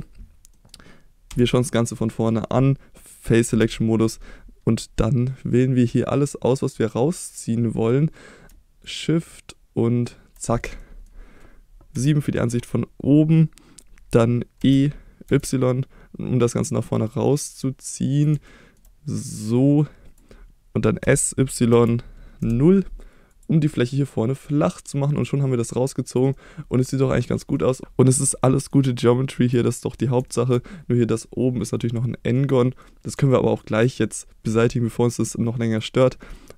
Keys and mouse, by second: 0.5 middle click, 1.3 KP_1, 3.5 3, 5.0-7.3 drag, 8.9-10.1 shift+drag, 10.8 middle click, 11.9 KP_7, 14.6 e, 15.3 y, 18.2 click, 18.5 shift+middle click, 19.6 click, 21.0 s, 21.7 y, 22.4 0, 23.3 click, 23.7-24.1 middle drag, 25.3-26.2 drag, 26.3 middle click, 27.6 middle click, 28.4 middle drag, 29.0-29.4 shift+middle drag, 29.7-30.0 middle drag, 30.3 shift+middle drag, 32.6 middle click, 33.3 shift+middle click.